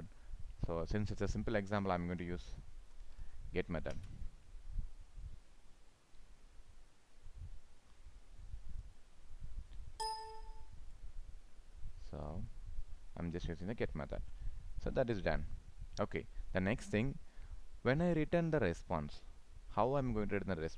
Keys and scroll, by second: 3.9 ctrl+space.